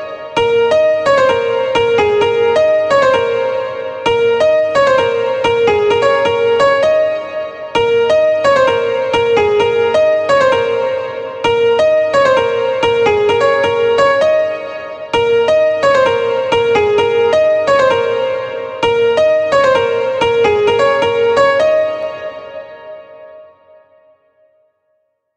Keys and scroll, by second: 21.4 space.